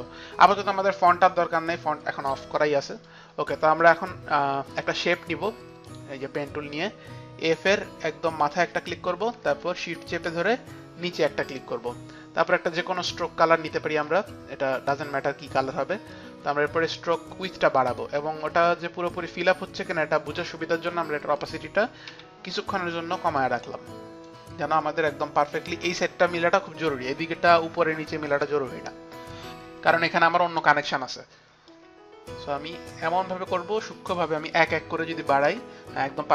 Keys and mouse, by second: 3.1 click, 5.9 click, 8.4 click, 11.1 shift+click, 12.6 shift+click, 16.2 click, 19.1 click, 21.4 click, 22.1 t, 23.4 click, 23.4 t, 26.3 click, 31.8 click, 34.2 click, 35.3 Up.